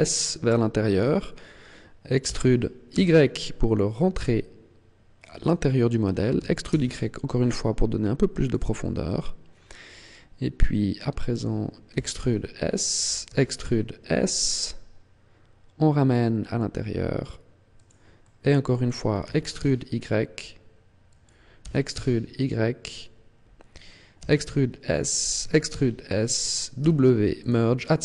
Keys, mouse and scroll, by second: 1.0 click, 2.2 e, 5.4 click, 6.2 e, 8.5 click, 8.7 middle click, 11.8 e, 13.2 e, 17.8 click, 18.1 middle click, 19.1 e, 21.1 click, 21.5 e, 22.8 click, 24.1 e, 25.2 click, 25.3 e, 26.7 click, 26.7 w.